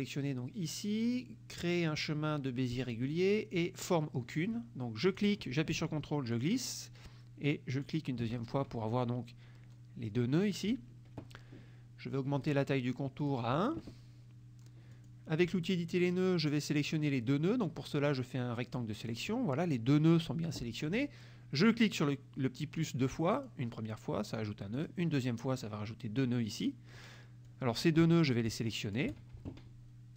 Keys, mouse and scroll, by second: 2.8 click, 5.1 click, 6.4 ctrl+click, 7.8 ctrl+click, 12.5 right click, 13.3 click, 15.0 click, 17.0-19.4 drag, 23.5 click, 24.9 click, 27.6 click, 28.7 shift+click.